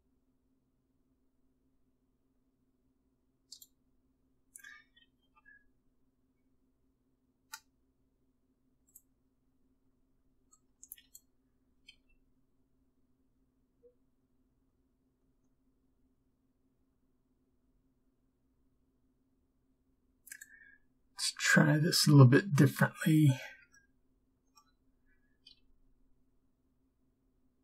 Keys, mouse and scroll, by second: 5.3 g, 12.0 b, 12.0 g, 25.6 b, 25.6 g.